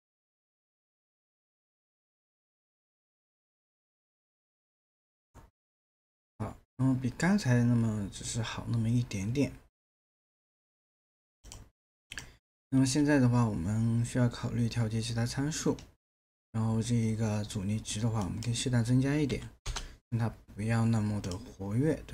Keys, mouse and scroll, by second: 19.3 KP_1, 19.6 Return.